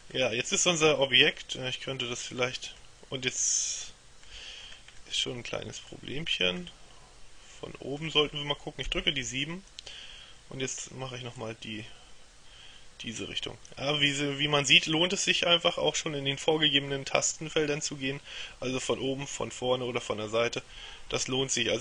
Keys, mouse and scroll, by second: 0.2-3.0 middle drag, 4.7-5.1 scroll down 1, 5.1 middle click, 6.3 scroll down 1, 6.5 scroll up 1, 6.8 middle click, 8.9 KP_7, 11.5-14.3 drag.